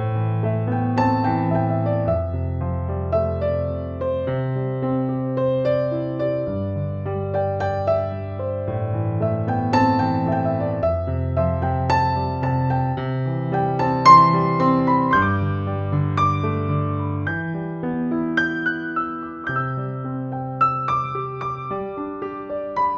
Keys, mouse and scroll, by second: 12.4 click, 12.5-18.2 drag, 18.2-19.8 drag.